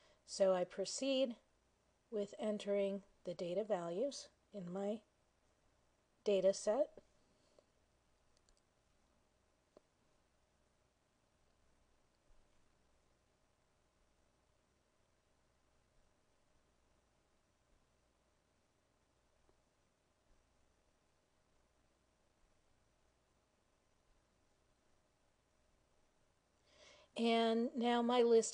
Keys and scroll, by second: 0.9 1, 3.2 Return, 6.8 7, 8.7 Return, 12.4 8, 14.1 Return, 16.1 3, 20.4 Return, 20.5 9, 22.6 Return, 24.2 5, 25.8 Return.